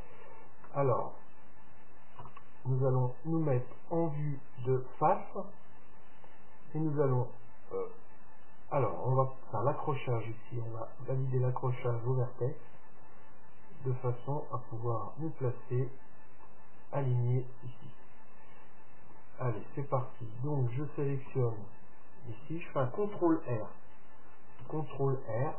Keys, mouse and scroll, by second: 0.9-2.8 middle drag, 2.4 KP_1, 10.1 click, 10.7-13.4 drag, 14.1-15.9 drag, 19.7 Tab, 21.5 a, 24.8 ctrl+r.